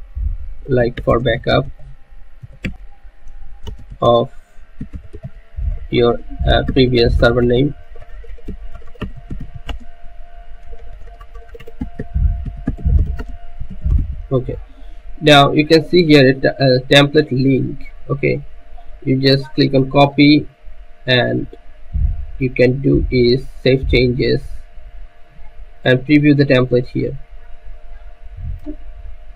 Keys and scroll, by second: 0.0-10.1 typing, 11.3-15.6 typing.